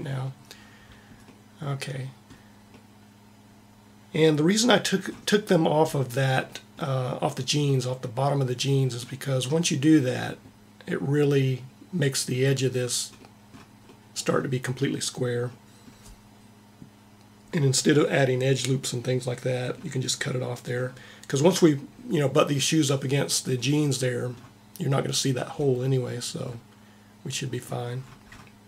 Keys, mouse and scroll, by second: 1.2-3.5 middle drag.